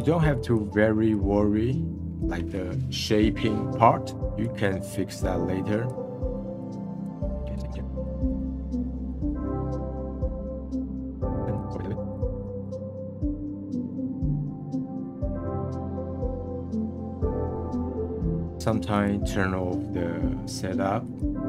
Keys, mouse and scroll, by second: 6.1 middle click, 6.3-7.1 drag, 7.1 middle click, 7.5 click, 7.7 middle click, 7.9 drag, 8.1 middle click, 8.3-8.9 drag, 8.9 middle click, 9.1 click, 9.1 middle drag, 9.3 click, 9.3 middle click, 9.5 click, 9.5 middle click, 9.7 click, 9.7 middle click, 9.9 click, 10.0 middle click, 10.1 click, 10.3 middle click, 10.4 drag, 10.7 middle click, 11.0 click, 11.0 middle click, 11.1 scroll down 1, 11.2 middle click, 11.5 click, 11.6 middle drag, 11.9-12.3 drag, 12.3 middle click, 12.4 click, 12.5 middle click, 12.6 click, 12.8-13.9 middle drag, 13.9 click, 13.9 middle click, 14.1 scroll up 1, 14.2-14.7 drag, 14.7 middle drag, 14.9 click, 15.1 middle click, 15.3 click, 15.8 middle click, 16.3-16.7 drag, 16.7 middle drag, 17.0 click, 17.2-17.6 middle drag, 17.6 ctrl+z, 17.7 ctrl+z, 17.8 middle click, 18.0-18.6 drag, 19.0-20.4 drag, 21.0 click.